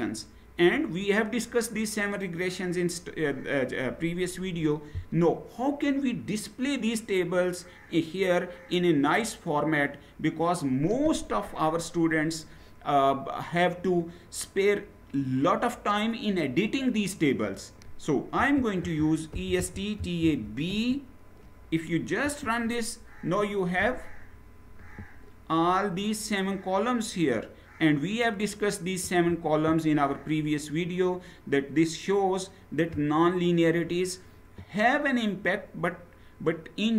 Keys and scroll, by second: 18.0-20.4 typing, 22.0 Return.